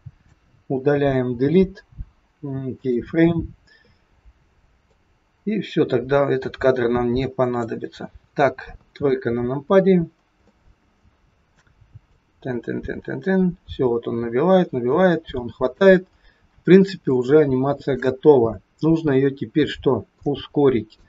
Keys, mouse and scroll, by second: 1.2 Delete, 4.9 click, 8.6 KP_3, 9.1-10.2 scroll down 10, 10.4 shift+middle click, 12.1 click, 16.0 scroll down 3, 16.7 scroll down 2, 17.1 shift+middle click, 19.4-20.2 scroll down 7, 20.1 middle click.